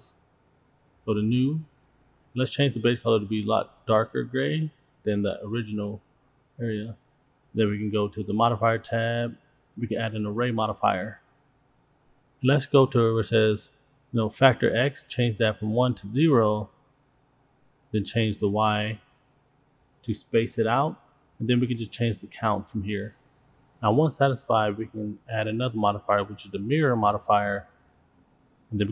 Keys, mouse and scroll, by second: 1.5 click, 2.9 click, 6.9 shift+middle click, 6.9-8.3 scroll down 2, 8.3 click, 9.7-11.5 drag, 15.4-17.2 drag, 17.5-22.6 drag, 23.2 click, 23.3 click, 23.4 click, 23.6 click, 24.8 click, 27.1-28.7 drag.